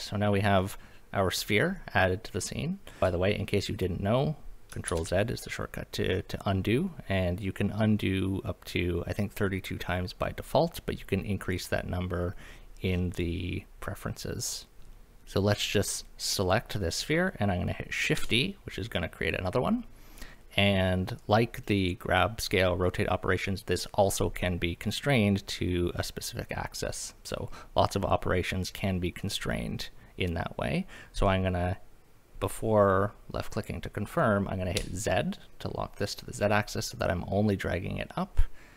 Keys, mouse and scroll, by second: 3.0 r, 3.0 x, 3.7 click, 4.9 ctrl+z, 14.7 click, 18.2 shift+d, 34.7 z.